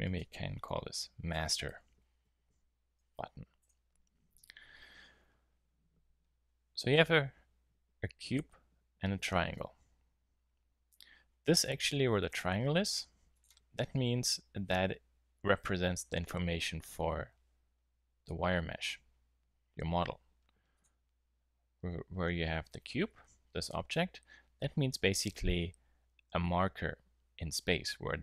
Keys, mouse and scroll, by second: 1.8 t, 12.3-14.1 drag, 20.7 click.